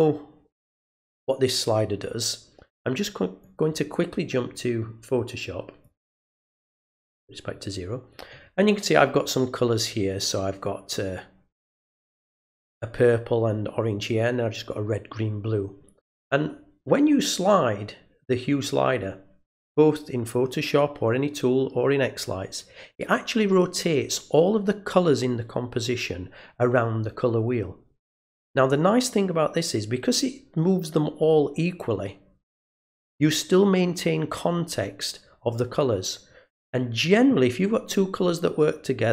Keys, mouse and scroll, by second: 3.4 click, 5.8 click.